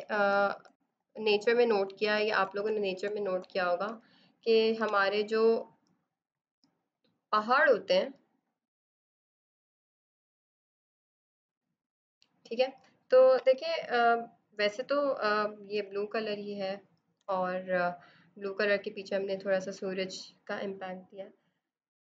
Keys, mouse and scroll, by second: 0.0-2.3 typing, 6.7 click, 8.1 click, 8.9 right click, 9.0 click, 10.6 click, 11.5 click, 12.2 click, 12.6 right click, 12.7 click, 14.6 b, 14.7 alt+click, 14.9 b, 15.0 click, 15.9-16.8 typing, 16.2 click, 16.4 click, 16.9 click, 17.9 click, 18.4 ctrl+d, 19.0 Return, 19.4 b.